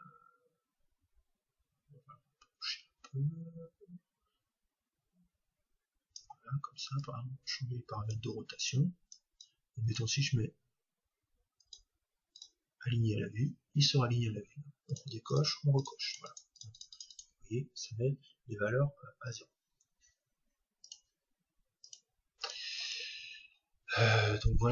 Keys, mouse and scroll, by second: 7.0-11.3 drag, 11.6-14.3 drag, 14.9-18.9 drag, 20.8-24.7 drag.